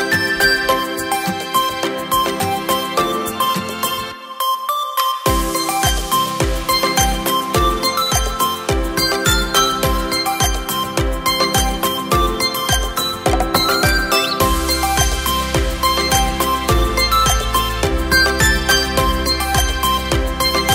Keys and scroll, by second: 5.6 v, 18.1 BackSpace, 18.5 KP_0.